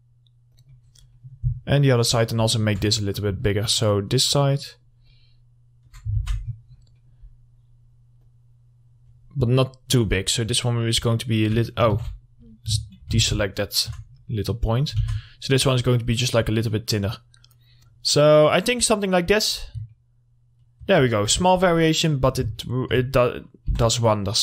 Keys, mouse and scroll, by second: 1.7-2.0 scroll down 1, 2.0 middle click, 2.3-2.8 scroll up 1, 3.1 middle click, 3.6-6.4 ctrl+drag, 6.4 alt+x, 6.6-7.1 scroll down 1, 7.1 middle click, 7.4-7.8 scroll up 1, 7.8-8.4 scroll down 1, 8.4-12.1 drag, 12.1 ctrl+z, 12.3 ctrl+middle click, 12.6-12.9 scroll up 1, 13.4 alt+x, 13.5 alt+click, 14.3 scroll down 1, 14.5 middle click, 15.0 scroll up 1, 15.2 alt+x, 15.4 middle click, 16.3-19.6 drag, 19.6 scroll down 1, 20.1 alt+middle click, 21.4-22.2 scroll up 1, 22.2 middle click, 22.4 scroll up 1, 22.8 alt+middle click, 23.9 3, 23.9 click.